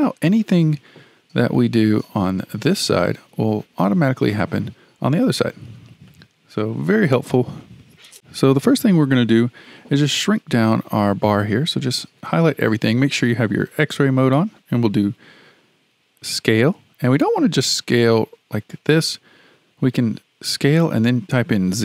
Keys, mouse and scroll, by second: 0.1-1.6 shift+middle drag, 1.6 click, 2.6 g, 6.1-8.1 shift+middle drag, 11.5 click, 16.3 s.